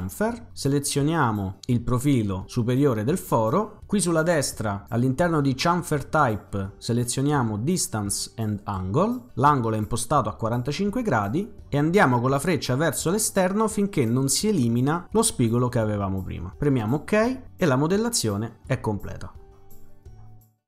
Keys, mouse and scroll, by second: 1.7 click, 6.0 click, 8.6 click, 11.6-15.2 drag, 16.8 click, 18.9 middle click, 18.9-19.4 scroll up 1, 19.7-20.2 scroll up 2.